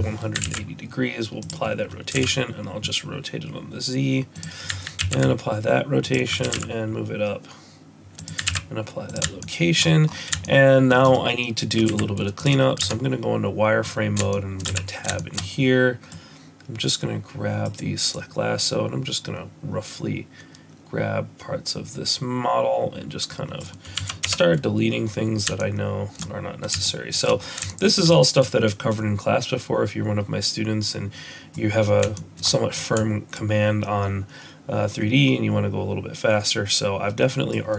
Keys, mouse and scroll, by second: 0.4 ctrl+a, 2.1 r, 5.0 ctrl+a, 6.4 g, 8.4 ctrl+a, 9.4 shift+middle click, 9.7-10.2 shift+scroll up 7, 10.4 shift+middle click, 11.8 z, 13.5 Tab, 14.3 shift+middle click, 14.8 a, 15.1 shift+middle click, 16.0 click, 18.1 click, 23.9 x, 25.5 shift+middle click, 26.8 shift+middle click, 27.2 shift+middle click, 27.3 scroll up 2, 27.6 shift+middle click, 28.3 click, 32.1 shift+middle click, 32.4-32.8 scroll up 3, 33.3 shift+click.